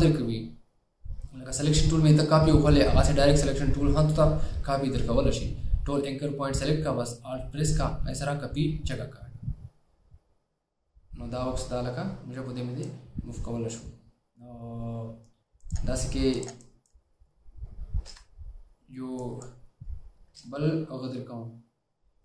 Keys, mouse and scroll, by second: 18.2 Delete.